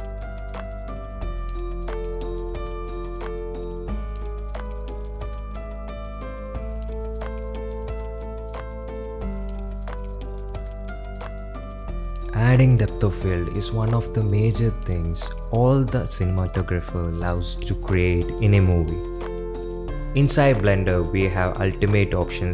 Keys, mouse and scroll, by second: 2.1-10.8 drag, 11.3 shift+Left, 12.2 middle click, 13.8 click, 15.5-17.9 drag, 18.8-21.6 drag.